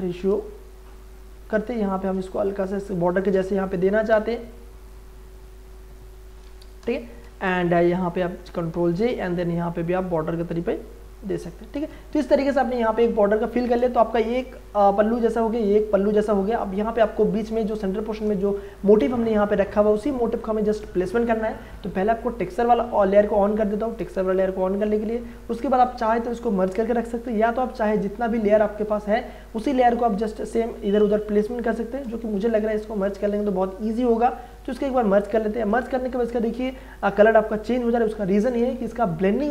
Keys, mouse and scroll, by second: 1.1 click, 2.3 space, 2.5 ctrl+click, 3.0 click, 3.7 ctrl+j, 4.1 ctrl+t, 4.9-7.2 drag, 7.2 Return, 8.4 ctrl+j, 8.7 ctrl+t, 9.4-11.7 drag, 11.7 Return, 12.8 shift+click, 13.4 ctrl+e, 13.8 ctrl+space, 14.1 ctrl+click, 14.3 ctrl+space, 20.2 scroll up 1, 21.4-22.4 scroll down 1, 22.4 click, 27.9 click, 28.5-30.2 scroll down 1, 32.5 click, 35.4 ctrl+e, 38.7 space, 38.9-39.5 ctrl+drag.